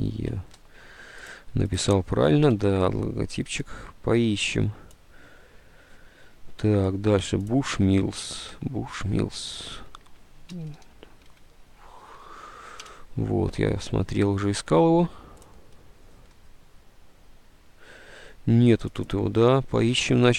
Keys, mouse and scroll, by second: 0.3 alt+Tab, 2.6 Tab, 8.4 alt+Tab, 9.8-12.0 typing, 12.6 Down, 12.9 Return.